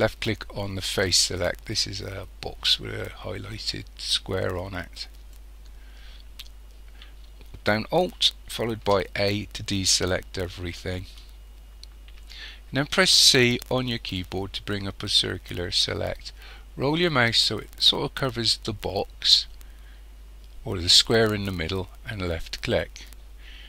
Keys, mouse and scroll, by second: 4.8 click, 8.9 alt+a, 13.1 c.